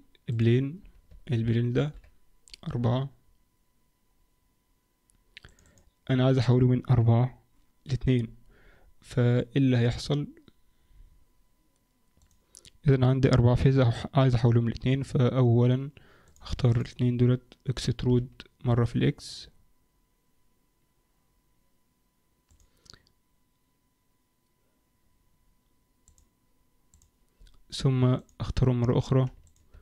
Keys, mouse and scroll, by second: 0.8 scroll up 1, 1.0 Tab, 1.7 ctrl+r, 16.2 click, 16.7 shift+click, 18.0 e, 27.1 click, 28.2 click, 29.4 shift+click.